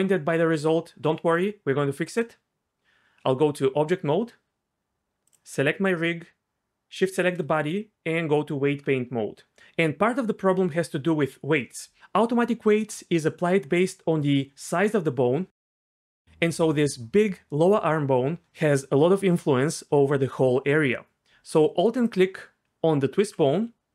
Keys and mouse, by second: 3.4 Tab, 7.7 Tab, 16.1 alt+click, 22.1 alt+click, 23.4 f.